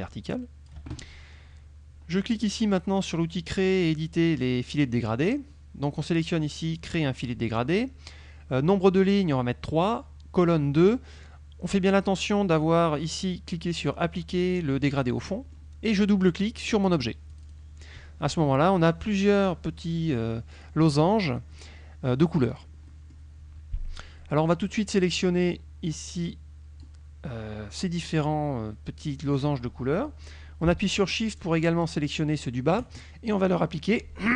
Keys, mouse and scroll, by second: 4.8 click, 6.8 click, 15.4 middle click, 17.4 click, 19.5 click, 20.6 click, 21.6 click, 22.6 click, 23.0 middle click, 25.0-27.1 drag, 31.4 shift+click.